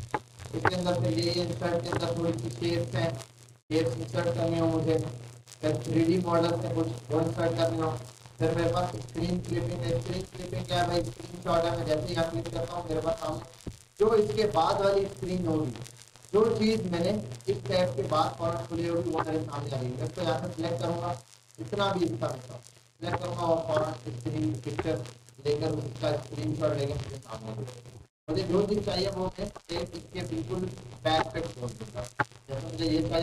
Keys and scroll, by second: 27.1 Delete.